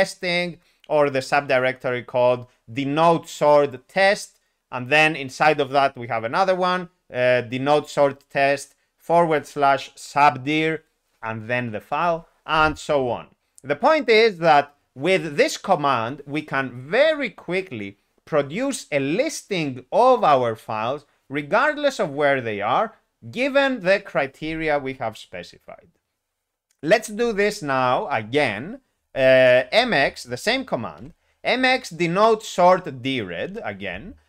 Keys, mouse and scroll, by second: 29.8 alt+x, 31.0 alt+p, 33.4 Return.